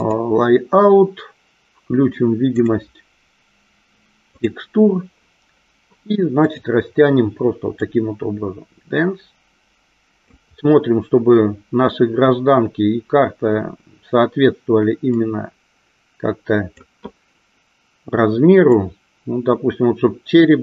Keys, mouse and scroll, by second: 2.5-4.8 drag, 6.5 click, 7.8-10.2 drag, 15.0-16.8 drag, 18.8-20.6 drag.